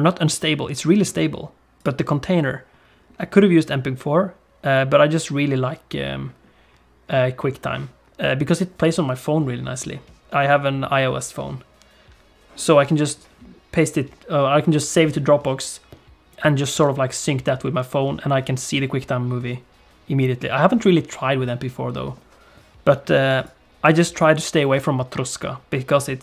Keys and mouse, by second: 1.8-5.0 drag, 23.3-26.2 drag.